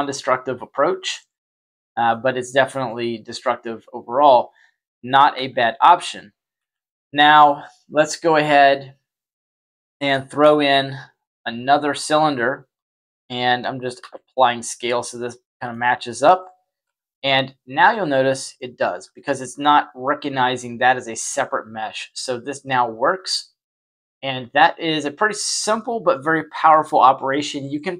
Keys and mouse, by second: 2.0-2.8 middle drag, 4.4 click, 5.3 Tab, 6.5 z, 6.9 Tab, 8.7 click, 10.2 shift+a, 12.7 s, 13.9 ctrl+a, 15.4 middle click, 16.8 y, 17.8 y, 18.2-18.5 middle drag, 18.8 y, 21.9 y, 24.4 click, 25.6-26.1 middle drag.